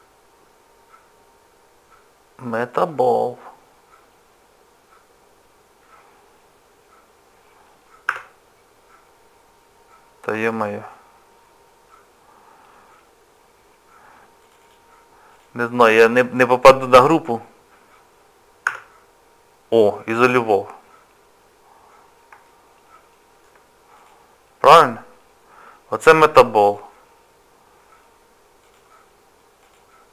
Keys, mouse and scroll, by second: 8.1 KP_Divide, 10.3 click, 10.5 click, 12.8 scroll down 1, 12.8 scroll up 1, 12.9 scroll down 2, 13.2 scroll up 1, 13.2-13.5 scroll down 1, 13.5-14.4 scroll up 4, 14.4 click, 14.6 click, 15.3 click, 21.4-21.7 scroll down 2, 22.0 scroll down 1, 22.4 shift+middle click, 24.0 click, 26.6 click, 29.6 click.